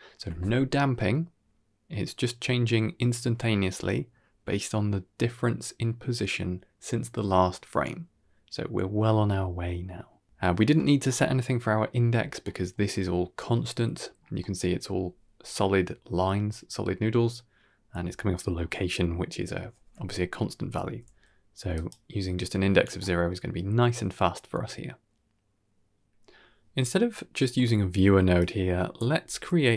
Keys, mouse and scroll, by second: 10.2 scroll down 2, 10.2 shift+space, 10.4-11.6 scroll up 4, 10.6 middle drag, 11.6-12.0 scroll up 1, 12.0-12.5 scroll down 3, 12.3 middle click, 14.0 scroll up 2, 14.3 middle click, 17.8 scroll down 1, 18.0 middle click, 18.5 scroll up 1, 20.7 scroll up 1, 20.7 g, 22.0 scroll down 1, 22.2 middle click, 23.4-23.8 scroll down 2, 23.7-24.2 middle drag, 24.4-24.8 drag, 24.9 g, 26.2 middle click, 26.5 click, 26.5 g, 26.7 g, 27.2-28.2 scroll down 5, 27.4 middle click, 28.2 click, 29.2 g.